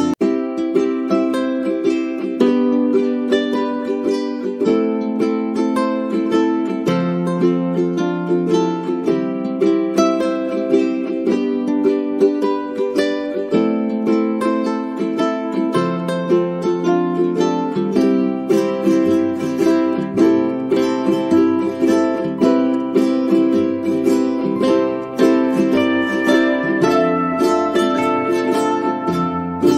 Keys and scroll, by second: 0.0-5.3 typing, 13.0 Caps_Lock, 26.3 ctrl+z.